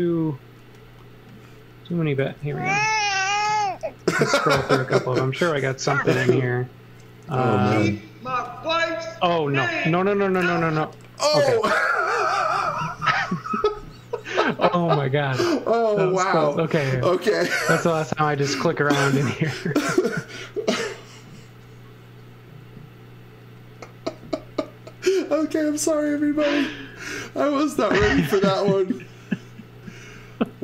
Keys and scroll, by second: 1.9-3.9 typing, 5.7 m, 18.6 z, 26.0 x, 26.3 v, 27.4 x, 27.7 v, 29.7 space.